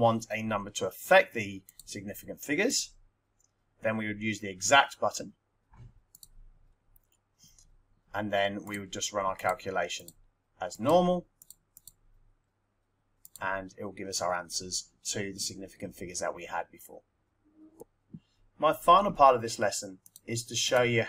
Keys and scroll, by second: 1.6 2, 2.7 4, 9.4-11.7 typing, 13.2 Return.